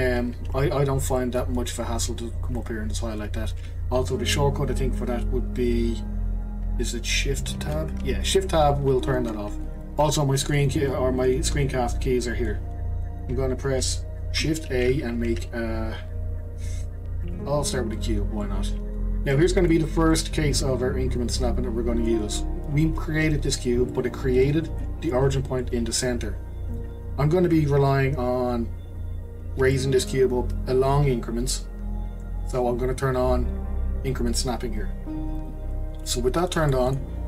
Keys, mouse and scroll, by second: 1.2-2.6 middle drag, 2.6-5.7 drag, 7.6 shift+Tab, 9.5 shift+Tab, 13.3-14.7 middle drag, 14.7 shift+a, 18.4-22.4 middle drag, 22.4-23.9 scroll up 2, 23.9-28.8 middle drag, 29.7-32.7 shift+middle drag, 35.3 click, 36.3-36.7 scroll down 2, 36.7 middle click, 37.0-37.2 scroll down 1.